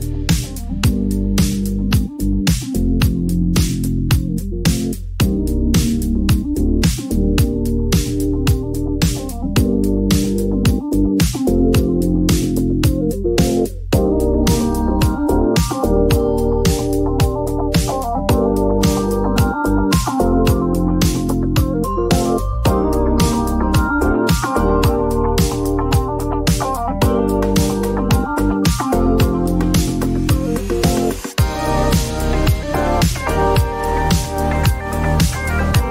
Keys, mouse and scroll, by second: 1.7 click, 2.5 click, 4.8 click, 7.1 click, 11.0 click, 11.9-12.8 typing, 13.1 Return, 15.4 click, 15.8-16.5 typing, 17.3 Return, 20.7 click, 21.1-22.2 typing, 22.3 Return, 24.8 middle click, 25.8 click, 29.5 right click, 33.3 click, 34.6-35.6 typing.